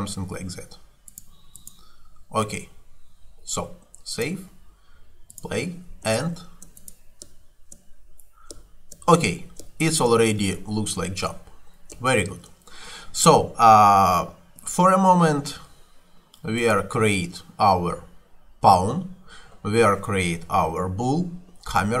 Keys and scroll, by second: 6.2 space, 14.6 Escape.